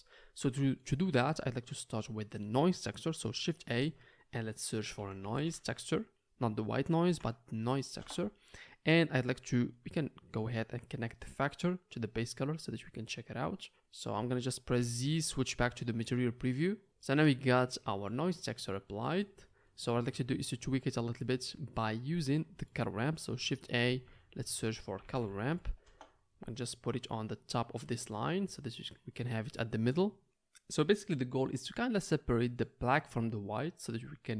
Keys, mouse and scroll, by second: 3.7 shift+a, 9.2-13.4 drag, 9.2 middle click, 9.2 right click, 13.4-15.7 middle drag, 15.5 z, 15.7 click, 16.1-21.6 middle drag, 16.1 right click, 23.8 shift+a, 27.0 click, 27.0-28.5 middle drag, 27.0 right click, 28.2 click, 28.2 right click, 28.5 right click, 28.6-34.3 right drag.